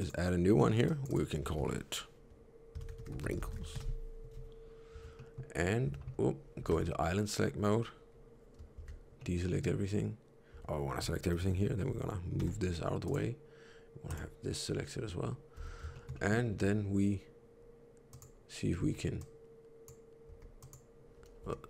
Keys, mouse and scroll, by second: 0.8 click, 4.8 Tab, 5.0 middle click, 5.6 scroll up 1, 5.8 Tab, 6.6 3, 9.1 middle click, 10.4 a, 12.3 g, 14.0 click, 15.5 alt+a, 15.8 shift+middle click, 16.1 middle click, 16.4 3, 18.0 click, 18.6 3, 19.2 click, 20.1 3, 20.5 click, 21.3 c.